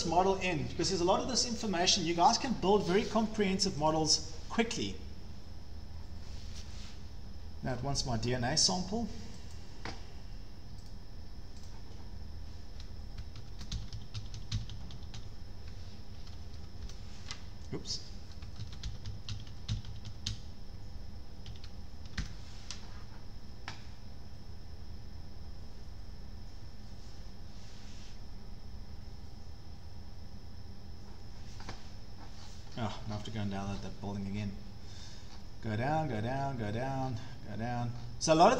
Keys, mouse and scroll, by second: 3.9-8.9 drag, 9.5 click, 10.0 drag, 10.9 right click, 11.3 click.